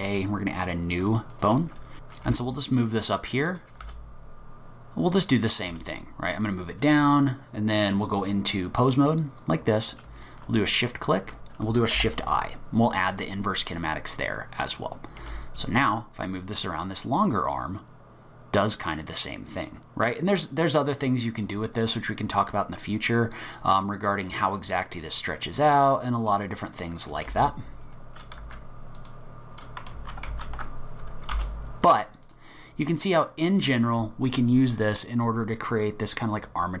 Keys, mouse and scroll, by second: 1.3 click, 1.9 ctrl+z, 2.3 g, 3.8 r, 5.7 g, 8.1 click, 10.2 shift+click, 12.0 shift+i, 15.2 g, 26.5-27.3 scroll down 1, 27.3-29.0 scroll down 4, 27.3 g, 29.9 ctrl+z, 30.3 ctrl+z, 31.3 g, 32.6-33.2 scroll up 1, 33.2 scroll up 4.